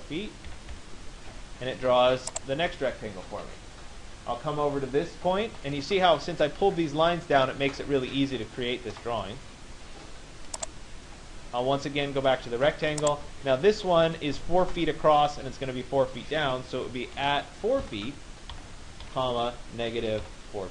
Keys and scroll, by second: 1.0 Return.